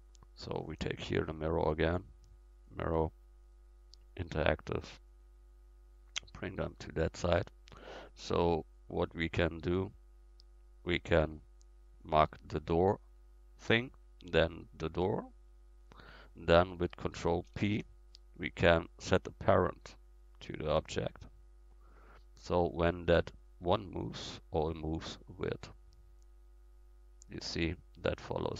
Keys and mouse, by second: 6.1-8.5 drag, 9.5 middle click, 11.6-14.7 drag, 14.7 right click, 17.5 ctrl+p, 21.4-22.0 middle drag, 22.0-23.2 right drag, 23.2-25.3 middle drag, 27.0-28.0 drag, 28.0-28.5 middle drag.